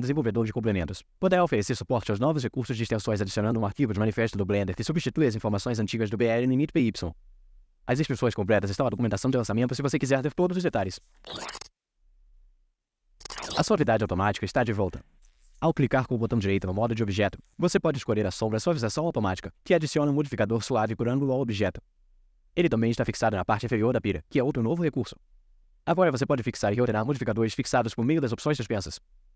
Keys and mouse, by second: 16.3-18.8 right drag, 19.5 click, 20.4-21.8 drag, 21.8 middle click, 22.7 click, 24.2-25.4 drag, 27.1-29.3 drag.